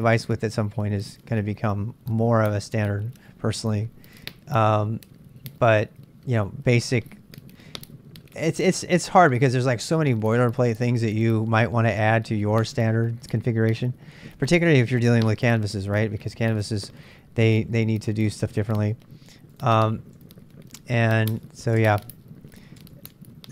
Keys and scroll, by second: 21.3 Tab, 21.8 super+Tab.